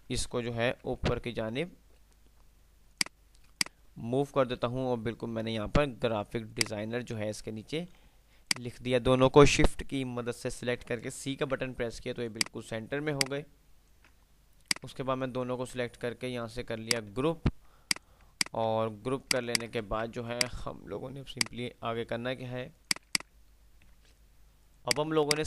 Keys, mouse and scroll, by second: 0.8 alt+t, 0.8 alt+h, 3.1 click, 6.6-7.8 drag, 11.6 c, 12.5-14.8 drag, 15.3-15.8 alt+click, 17.0 F3, 18.5 click, 19.6 shift+click, 20.3 F3, 20.8 F2, 21.5 click, 21.8 F2, 23.0 click, 24.1 ctrl+F10, 24.6 click.